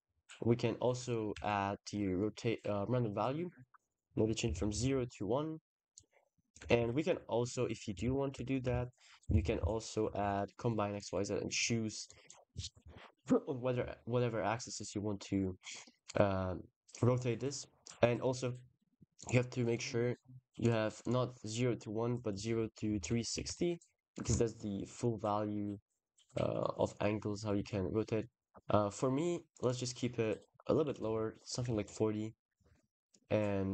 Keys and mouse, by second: 0.9 click, 1.1 shift+d, 3.7 click, 5.8 click, 6.6 shift+a, 9.2 BackSpace, 9.3 BackSpace, 11.2 click, 11.9 click, 17.9 click, 19.0 click, 20.5 click, 21.9-24.0 shift+drag, 27.9 shift+click, 29.0 click, 29.4-30.9 drag, 31.6 ctrl+s.